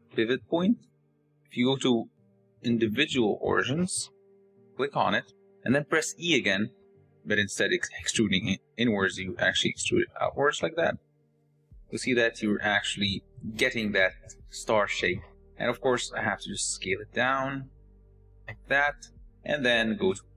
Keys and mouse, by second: 0.1-4.6 drag, 6.2 e, 12.7 click, 15.8 click, 16.6 s, 20.2 Tab.